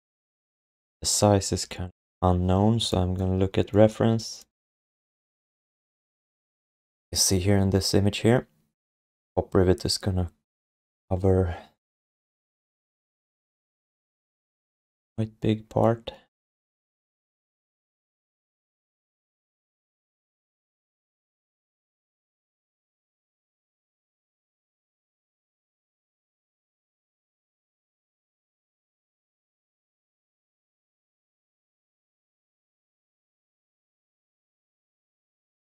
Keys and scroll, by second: 1.5 5, 13.9 4, 14.8 w, 22.8 r, 26.5 space, 27.4 space, 27.6 f, 31.9 w, 32.7 ctrl+d.